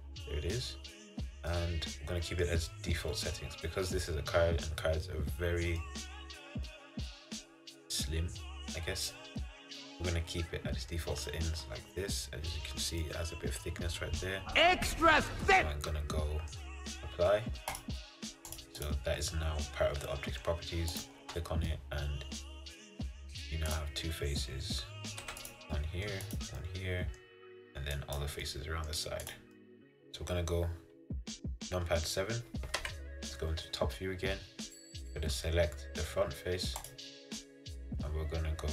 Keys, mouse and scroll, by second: 0.7 middle click, 1.3-1.6 scroll up 3, 1.6-8.9 middle drag, 11.3 scroll down 1, 11.4-12.8 scroll up 7, 12.8-13.1 scroll down 1, 13.1-14.4 middle drag, 14.4-14.8 scroll down 4, 14.8-16.7 middle drag, 16.7-17.8 scroll down 1, 17.8-19.3 drag, 19.3-21.0 middle drag, 21.0 click, 21.3 Tab, 21.8-23.8 middle drag, 23.8 click, 25.4 3, 25.5 click, 25.8 scroll up 1, 25.9 middle click, 26.4 click, 26.7-28.1 middle drag, 28.1 click, 28.6 middle click, 29.4 click, 29.7-32.8 middle drag, 32.9 KP_7, 34.1-34.6 scroll down 2, 36.9-38.7 drag.